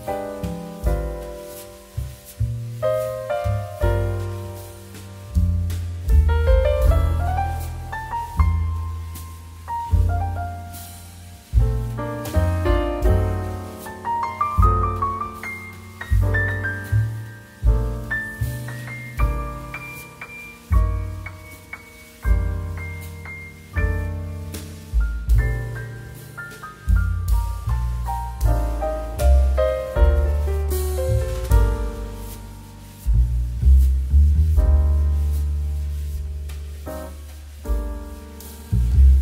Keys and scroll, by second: 1.7 shift+f, 6.3 shift+space, 18.7 shift+2, 26.0 z, 30.2 shift+space.